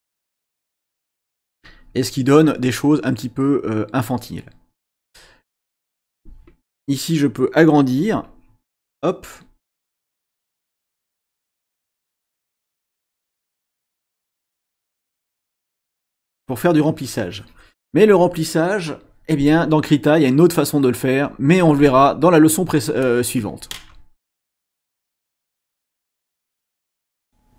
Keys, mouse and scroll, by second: 1.0-2.4 drag, 6.0 click, 8.2-9.4 shift+drag, 10.0-13.2 drag, 13.9-15.6 shift+drag, 15.7 click, 16.1-18.1 shift+drag, 21.1 click, 27.2 click.